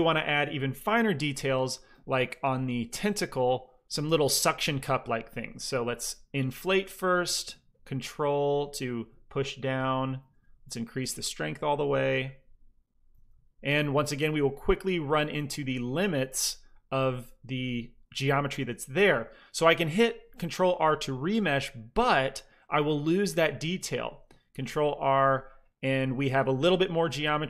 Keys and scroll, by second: 0.8 f, 1.6 f, 2.1 f, 2.8 f, 4.2 f, 4.6 f, 10.1 shift+f, 11.1 f, 13.0 f, 14.9 f, 24.5 ctrl+r.